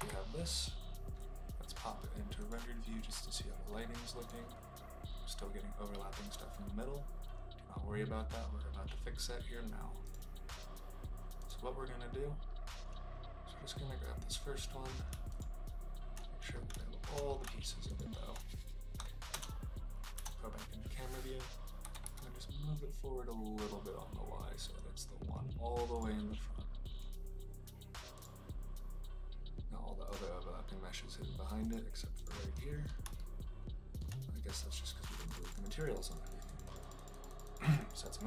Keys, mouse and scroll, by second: 10.1 click, 15.3 shift+middle click, 16.7 shift+middle click, 19.2 KP_0, 20.1 KP_0, 21.8 g, 22.0 y, 30.0 click, 31.6 click, 32.1 click, 33.2-33.9 shift+middle drag, 35.0 click, 35.2 click, 35.4 click, 35.7 click, 36.0 click, 36.1 click, 36.3 click, 36.6 click, 36.8 click.